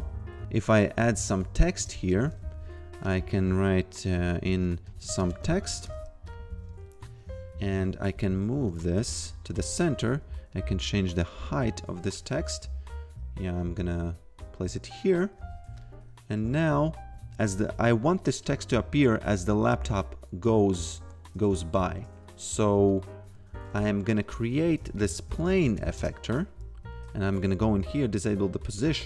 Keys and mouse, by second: 0.8-1.7 typing, 1.8 Return, 3.0 click, 4.2-6.7 typing, 6.3 click, 7.0 click, 8.7 click, 9.0 BackSpace, 9.1 click, 12.1 click, 15.8 click, 24.2 click, 24.7-26.3 typing, 27.2 click.